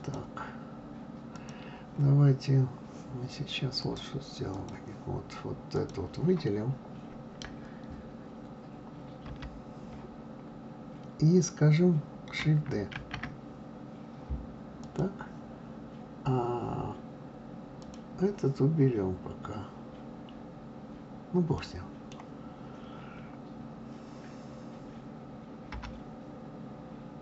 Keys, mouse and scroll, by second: 1.3 click, 3.8-5.9 drag, 13.0 shift+d, 17.8-18.3 drag, 21.6-24.6 middle drag, 25.7 g.